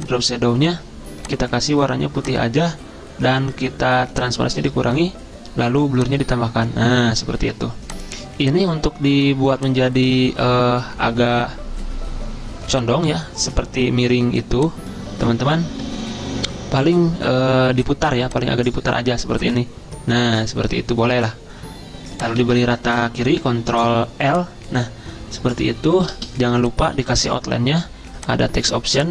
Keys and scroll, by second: 22.5 ctrl+a, 23.4 ctrl+l, 27.1 ctrl+a.